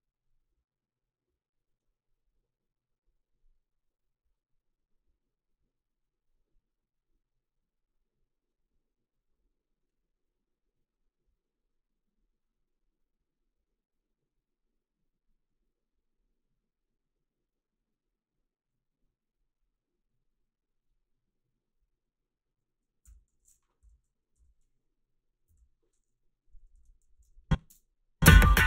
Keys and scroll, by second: 23.1 f, 23.8 i, 24.4 l, 25.5 k, 26.8 ctrl+r, 27.1 a, 27.7 space.